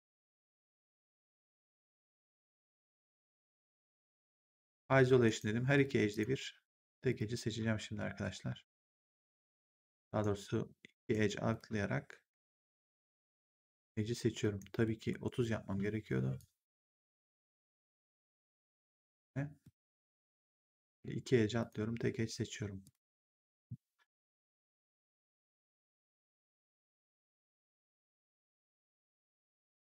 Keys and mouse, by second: 0.5 click, 2.2 click, 3.5 ctrl+1, 5.1 right click, 5.7 click, 6.6 right click, 7.0 click, 9.9 right click, 11.4 click, 13.3 shift+click, 14.3 right click, 15.0 t, 16.3 click, 19.5 right click, 20.1 click, 22.7 shift+click, 25.3 shift+click, 28.3 shift+click.